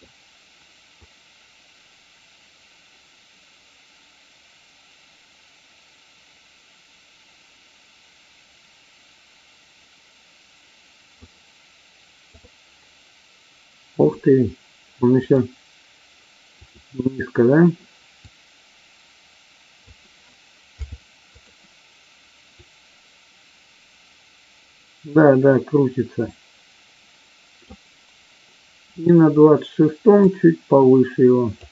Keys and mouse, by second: 0.9-11.2 drag, 15.2 click, 16.6 click, 18.3 click, 22.6-27.7 drag, 28.9 click, 30.3-31.6 drag.